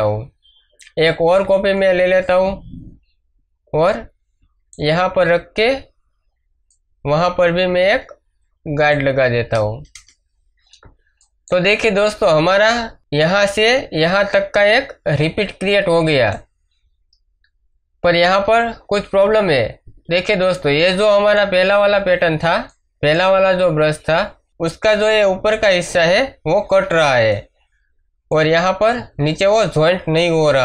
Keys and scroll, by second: 0.8 ctrl+j, 9.9 Return, 12.2 space, 19.8 ctrl+space, 20.3 ctrl+space, 27.0 space.